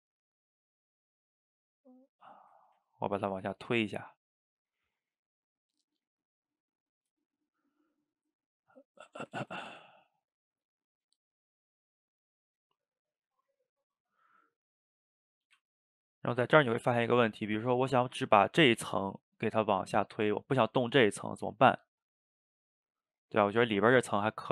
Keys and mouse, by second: 0.3-1.8 drag, 1.8 middle click, 2.7 ctrl+z, 2.8 ctrl+z, 3.3-5.1 middle drag, 5.1 click, 5.9 click, 7.2-8.5 shift+middle drag, 8.5 click, 9.5 ctrl+z, 9.8 f, 12.2 click, 12.8 middle click, 13.4-15.1 drag, 15.1 middle click, 15.5 f, 16.1 click, 17.0 ctrl+z, 17.4-19.2 middle drag, 19.2 click, 20.0 middle click, 20.3 ctrl+z, 21.2 middle click, 21.9 click, 22.7-24.0 middle drag, 24.0 click, 24.3 middle click.